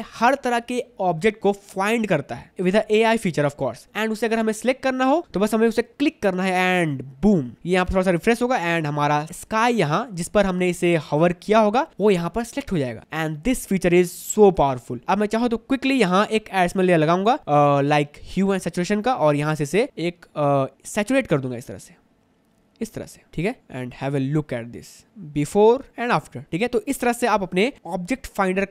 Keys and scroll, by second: 27.3 Delete.